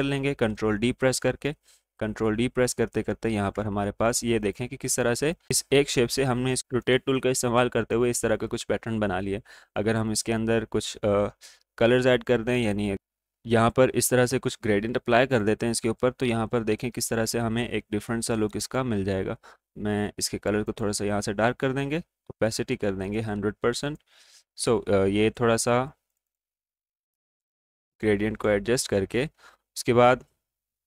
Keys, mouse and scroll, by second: 0.6 ctrl+d, 4.3-9.9 drag, 12.6 click, 13.0 click, 18.7 click, 26.2-29.4 drag, 29.4 g.